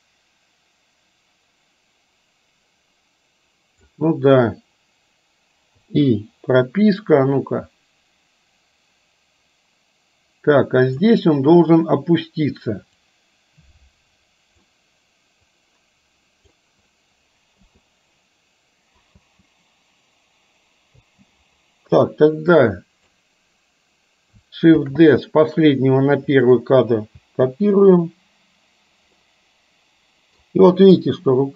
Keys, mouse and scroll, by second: 5.8 i, 7.5-11.1 drag, 13.3-14.7 drag, 15.6-16.6 drag, 17.6 i, 19.3 space, 21.1 space, 22.6 click, 24.8 shift+d, 27.2 space, 29.2-30.5 middle drag.